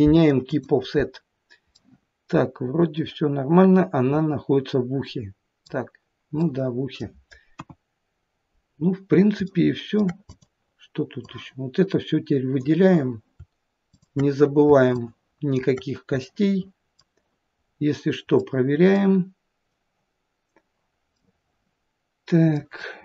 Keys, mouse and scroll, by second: 1.8 middle click, 6.4 middle click, 7.6 KP_1, 8.2-9.3 scroll down 2, 9.6 shift+middle click, 10.3 click, 11.2 click, 13.9 shift+click, 15.0 shift+click, 16.3 middle click, 17.7 scroll up 2, 18.5 middle click, 21.2 middle click.